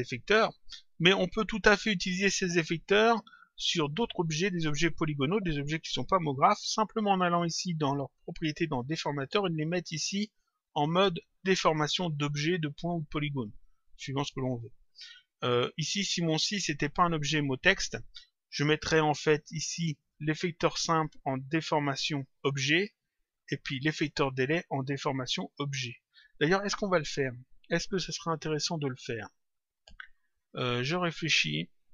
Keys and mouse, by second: 2.2 click, 8.8 click, 10.2 click, 15.0 click, 19.9 click, 21.5 click, 23.0 click, 26.0 click.